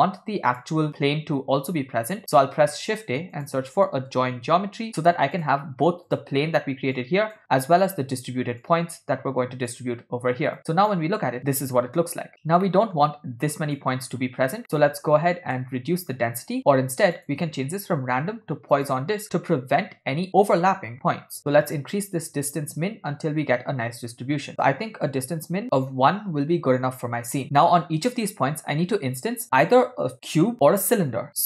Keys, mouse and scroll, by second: 2.2 click, 2.8 shift+a, 7.0 click, 7.9 click, 8.7-9.7 drag, 10.6-11.0 drag, 12.7 middle click, 13.9 click, 14.7 middle click, 15.5 ctrl+middle click, 17.2-19.0 drag, 21.7-25.6 drag.